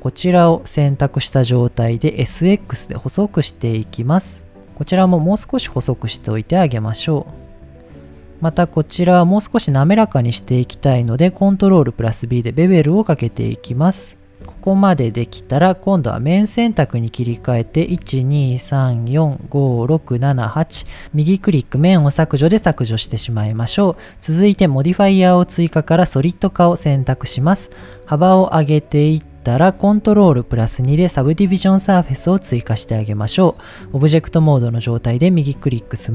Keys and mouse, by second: 0.3 click, 1.2 middle click, 1.8 s, 2.2 x, 4.8 click, 5.3 s, 5.6 x, 6.5 click, 7.0 middle click, 8.1 click, 8.6 middle click, 10.1 middle click, 10.8 ctrl+b, 14.3 Tab, 14.3 middle click, 14.4 Tab, 15.0 middle click, 16.4 click, 18.4 shift+click, 18.9 shift+click, 20.1 shift+click, 20.5 shift+click, 21.1-22.0 right drag, 23.0 Tab, 26.8 click, 27.1-27.8 middle drag, 28.6-29.6 drag, 30.7 ctrl+2, 32.2-32.5 shift+middle drag, 32.9-33.3 middle drag, 33.7 right click, 34.6-35.0 middle drag, 35.9 middle click.